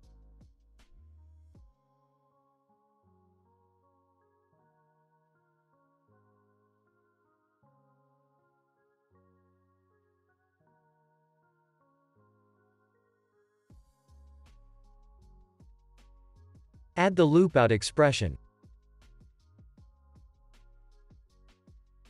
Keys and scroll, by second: 5.2 space, 9.5 ctrl+c, 11.8 space, 14.2 space, 14.5 ctrl+s, 17.3 l, 18.2 Down, 18.6 Return, 20.4 ctrl+s.